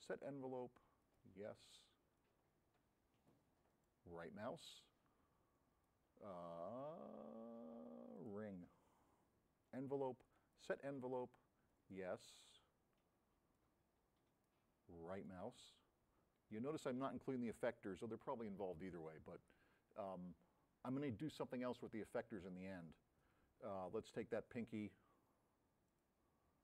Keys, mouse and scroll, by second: 2.1 click, 2.8-3.5 drag, 3.8 right click, 5.9 click, 8.2 click, 9.7 click, 10.3 click, 11.8 click, 13.6-14.7 drag, 15.2 right click, 24.4 click, 26.0 click.